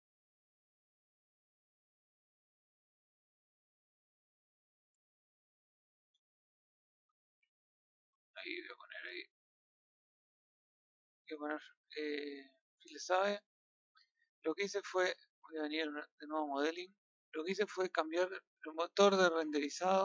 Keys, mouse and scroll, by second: 5.2 scroll down 1, 5.6 shift+middle click, 6.2 scroll, 6.3 scroll up 1, 7.0 scroll down 1, 7.6 shift+middle click, 9.1 scroll up 1, 10.1 scroll down 1, 17.8 click.